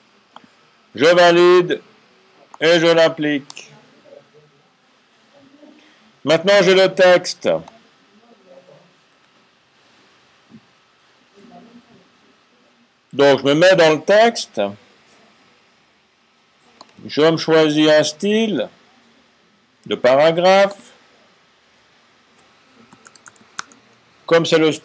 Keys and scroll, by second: 22.8-23.4 typing.